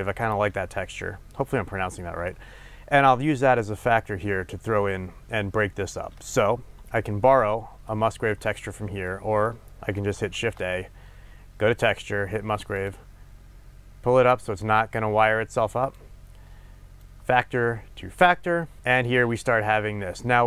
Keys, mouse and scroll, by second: 8.2-9.1 scroll down 2, 12.8 shift+a, 15.8 click, 17.1-20.4 drag.